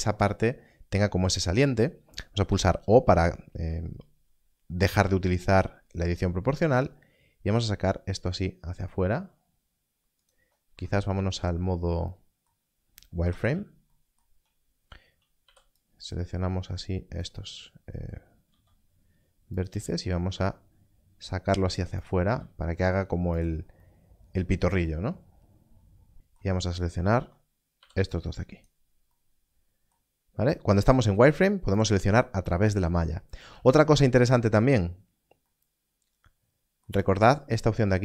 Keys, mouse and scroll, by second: 0.3 click, 2.4 click, 2.5 o, 5.4 g, 10.1 g, 10.6 right click, 11.3 scroll up 1, 15.4 b, 16.0 click, 18.4 click, 19.5 click, 19.6 g, 21.9 click, 22.2 click, 23.3 r, 23.3 click, 27.0 alt+a, 28.3 click, 30.7 click, 31.7 click.